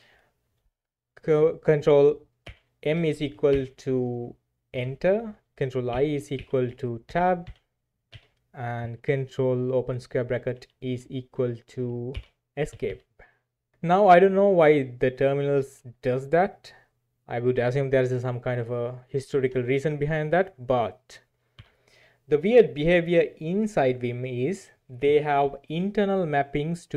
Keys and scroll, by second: 2.4 ctrl+m, 3.5 ctrl+m, 5.9 ctrl+i, 6.3 ctrl+i, 7.1 Tab, 7.5 Tab, 10.5 ctrl+[, 10.9 ctrl+[, 12.1 ctrl+c, 12.7 Escape, 12.8 Escape, 21.6 alt+3.